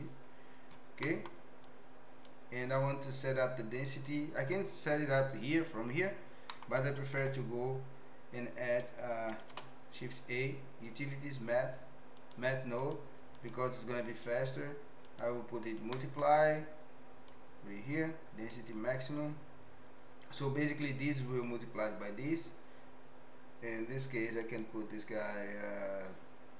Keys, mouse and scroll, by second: 1.1 middle click, 1.6 click, 4.1-6.0 drag, 6.4 middle click, 7.1 q, 9.4 shift+a, 13.5-15.2 drag, 15.9-16.2 middle drag, 17.2-18.5 drag, 24.4-26.5 drag.